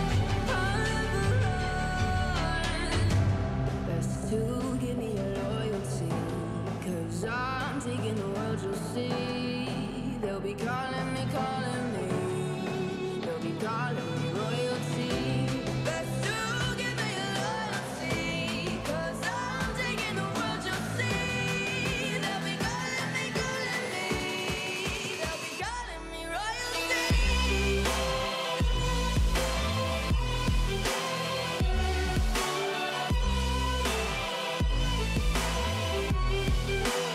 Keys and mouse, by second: 0.7-1.8 typing, 2.9-6.6 typing, 4.0 click, 8.1 s, 9.2 x, 9.5 s, 10.6 y, 10.7 y, 11.5 r, 12.6 x, 12.6 x, 12.7 x, 14.1 click, 15.7 click, 16.8 click, 17.6 click, 18.2 click, 23.4 click, 26.6 click, 28.0 s, 29.2 x, 29.2 x, 29.8 click, 29.8 x.